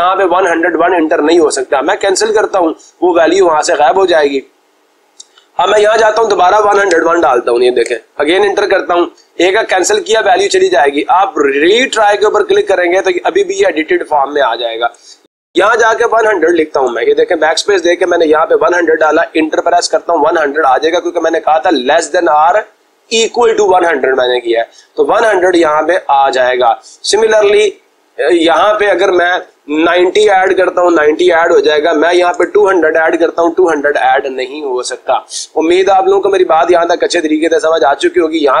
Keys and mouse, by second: 2.3-3.4 drag, 6.8-7.9 typing, 8.2 Return, 12.2 click, 15.3-15.7 typing, 16.9-18.6 typing, 25.4-26.5 drag, 27.4-28.4 drag, 30.0-30.3 typing, 30.6 Return, 31.9-33.1 typing, 38.0 click.